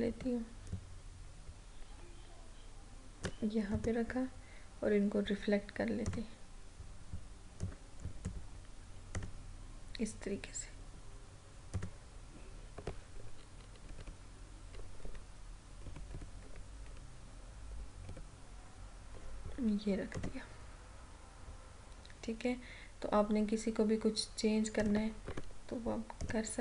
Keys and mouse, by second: 0.7-3.8 alt+drag, 3.8 right click, 6.1-9.2 drag, 11.8 click, 14.0 Up, 15.0 Left, 15.8 Up, 16.4 Left, 18.2 Up, 20.1 click, 20.2 click, 24.8 click, 25.3 Right, 26.3-26.6 drag.